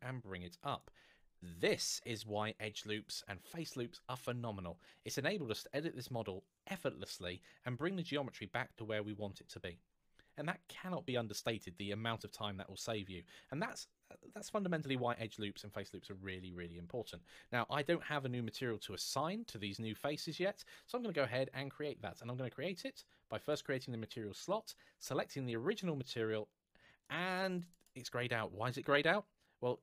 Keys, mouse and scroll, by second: 0.4 click, 12.5-14.1 scroll down 1, 16.1 scroll up 1, 23.1 click, 25.4 click, 27.2 click.